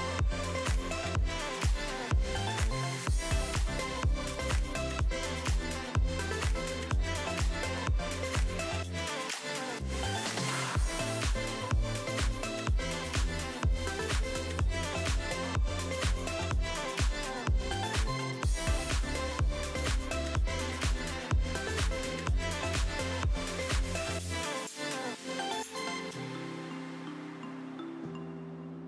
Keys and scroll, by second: 0.5 Down, 0.7 Up, 0.8 Up, 0.9 Up, 3.1 Down, 3.1 Down, 3.2 Down, 3.3 Down, 3.5 Up, 4.9 a, 9.3 ctrl+z, 9.5 a, 15.8 v, 18.4 v, 19.8 a, 22.7 v, 23.4 r, 25.1 ctrl+d, 25.3 ctrl+d, 25.4 ctrl+d, 26.0 v.